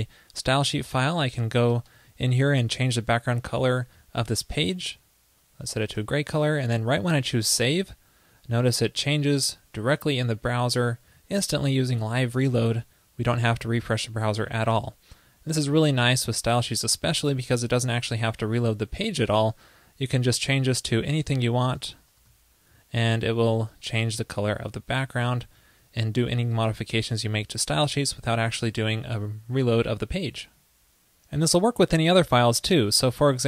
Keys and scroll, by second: 7.8 super+s, 22.5 super+s, 24.4 super+z, 24.4 super+z, 24.5 super+z, 25.3 super+z, 26.9 super+s.